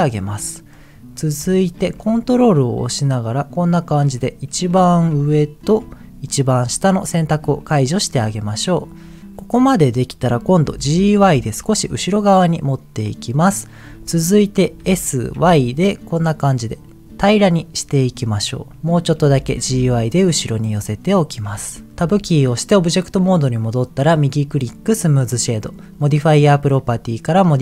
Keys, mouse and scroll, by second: 0.0 middle click, 0.9-1.4 scroll up 3, 1.5 shift+middle click, 2.9-4.0 ctrl+drag, 4.8 shift+middle click, 5.2 middle click, 6.2 ctrl+click, 8.1 middle click, 9.2 middle click, 9.6-10.0 scroll up 2, 10.6 g, 11.1 y, 13.4 click, 14.8 s, 15.5 y, 18.7 click, 19.2 g, 19.6 y, 21.2 click, 21.6 middle click, 22.1 Tab, 24.1-25.2 right drag.